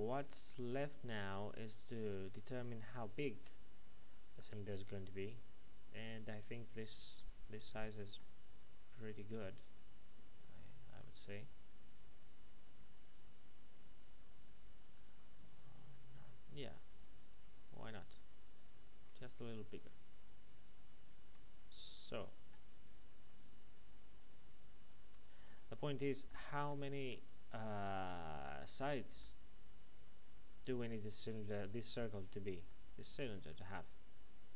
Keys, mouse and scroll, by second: 7.4 middle click, 14.0 click, 23.5 shift+click, 25.5 middle click, 27.4-28.4 scroll up 1, 28.4 middle click, 32.7 middle click.